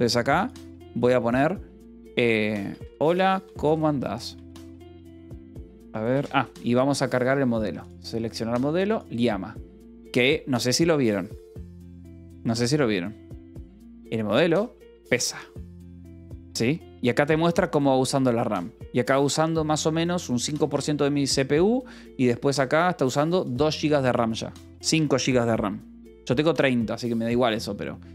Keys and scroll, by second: 2.4-4.1 typing, 4.7 Return.